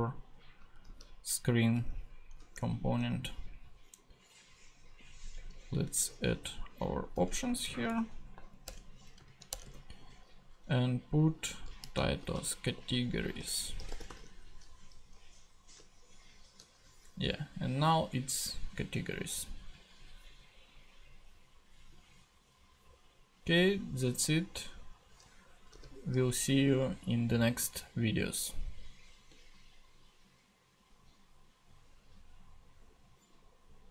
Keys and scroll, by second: 1.7 super+Tab, 5.3 Return, 7.1 Return, 7.4 super+Right, 7.7 super+Left, 8.3 Right, 8.6 Return, 9.0 Up, 9.2 super+Right, 9.5 super+Return, 9.6 super+v, 11.6-14.6 typing, 14.9 super+s, 15.1 super+Tab, 26.8 super+x.